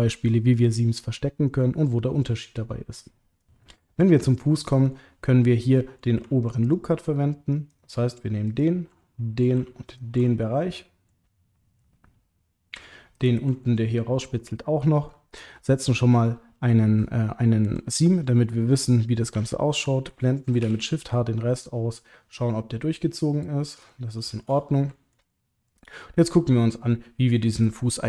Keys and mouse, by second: 5.0 middle click, 6.6 alt+shift+click, 7.7 alt+shift+click, 8.4 alt+shift+click, 9.0 middle click, 10.2 click, 10.3 middle click, 10.5 click, 10.6 middle click, 13.2 alt+shift+click, 13.6-15.1 middle drag, 19.3 l, 20.6 shift+h, 21.6 click, 21.9-23.7 middle drag, 23.9 shift+middle click, 25.0 ctrl+middle click, 25.3 middle click, 26.4-28.0 middle drag.